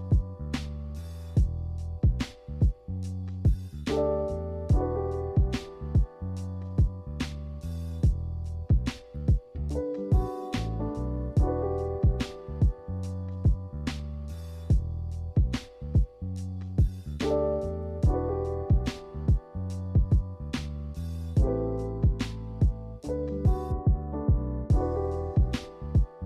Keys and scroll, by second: 2.6 a, 4.0 b, 5.5-6.6 typing, 14.5 a, 24.0 b.